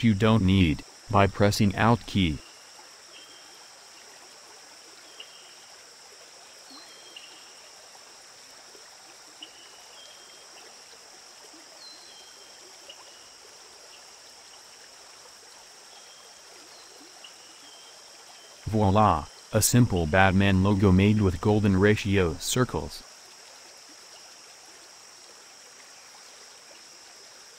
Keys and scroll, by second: 4.3 ctrl+z, 25.2 space.